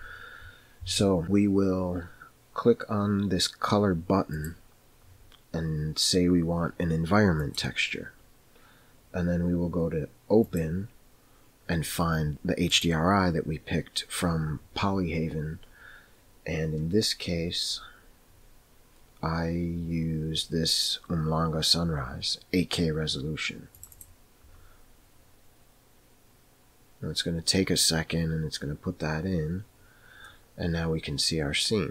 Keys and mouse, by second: 4.5-7.9 drag, 10.7 click, 30.5-31.9 middle drag.